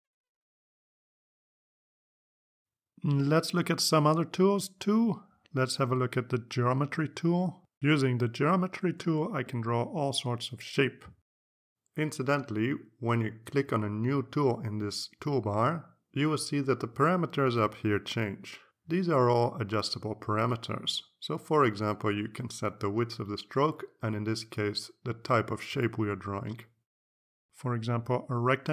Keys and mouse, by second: 0.1-0.9 drag, 6.4 click, 28.6-28.7 drag.